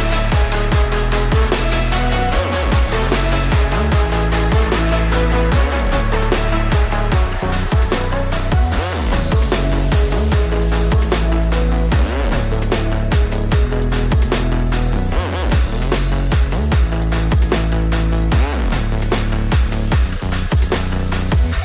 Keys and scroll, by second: 4.3 ctrl+z, 5.0 ctrl+z, 6.3 ctrl+z, 8.8 ctrl+z, 9.3 ctrl+z, 9.7 ctrl+z, 12.6 ctrl+z, 13.6 ctrl+z, 14.3 ctrl+z.